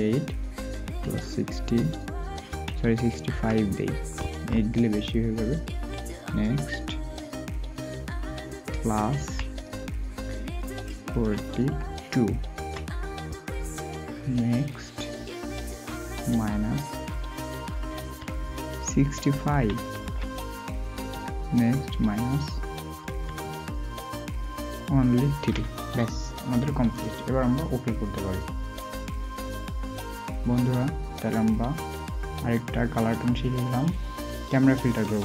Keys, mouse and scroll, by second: 2.5 typing, 9.1 typing, 12.5 typing, 19.5 typing, 23.0 typing, 28.8-29.1 typing.